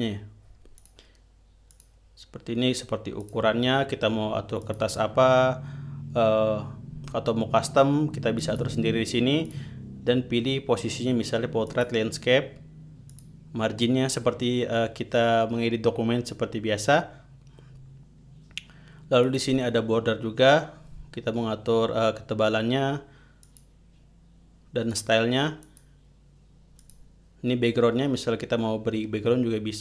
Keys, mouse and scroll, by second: 1.3 click, 2.2 click, 3.7 click, 5.1 click, 8.9 click, 10.0 click, 12.2 click, 13.6 click, 19.8 click, 24.0 click, 25.4 click, 26.2 click, 27.3 click.